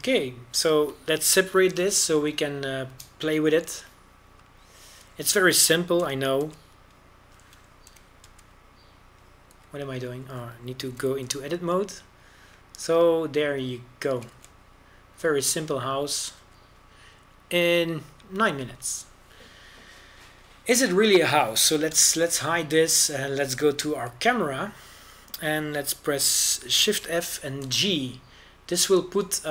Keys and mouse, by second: 0.2 ctrl+n, 0.4 ctrl+n, 0.6 Tab, 1.6 Tab, 3.7 p, 5.5 KP_1, 8.1 g, 8.5 z, 10.0 g, 10.4 z, 11.6 Tab, 13.0 g, 16.5 a, 17.4 z, 18.5 z, 22.1-24.0 right drag, 24.1 h, 25.9 KP_0, 29.1 shift+f.